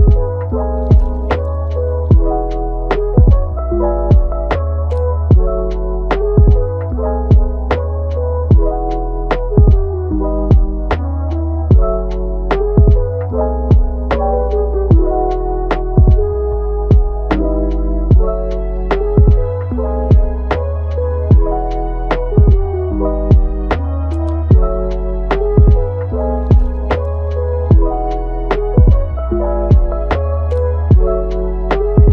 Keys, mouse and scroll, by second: 0.3 v, 2.3 g, 3.5 click, 3.8 g, 4.7 click, 6.4 click, 7.1 v, 8.5 click, 8.8 g, 10.1 click, 10.5 click, 10.7 g, 11.6 click, 11.8 g, 12.7 click, 13.7 click, 13.9 g, 15.0 click, 15.2 g, 17.1 click, 17.9-20.4 right drag, 20.4 click, 20.7 g, 22.9 click, 23.1 g, 24.7 scroll down 1, 25.3-26.2 scroll up 3, 26.2 click, 26.7-27.9 shift+middle drag, 27.9 g, 29.5 click, 29.9 g.